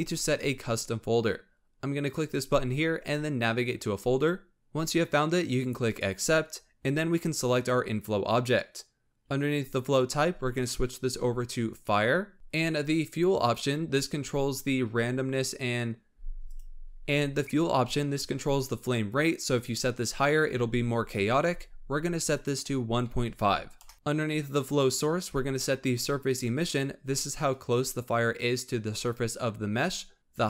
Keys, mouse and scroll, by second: 2.0-4.5 drag, 7.4 click, 9.8-12.3 drag, 13.3-16.3 drag, 22.3-23.9 drag, 24.4-27.4 drag.